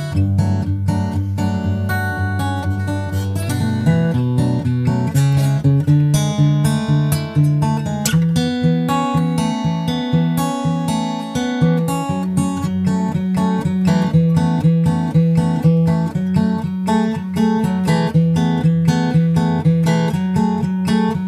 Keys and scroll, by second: 1.4 super+Tab, 18.6 super+Left, 18.8 shift+super+Right, 19.0 super+c, 19.3 super+v, 20.2 super+v, 20.5 super+v, 20.8 super+v.